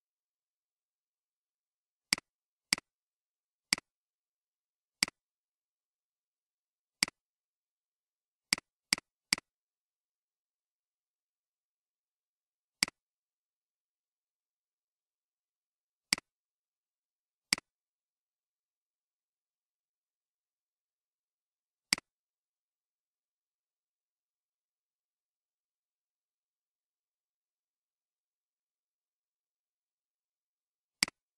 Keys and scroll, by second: 19.2 ctrl+c, 24.8 ctrl+v.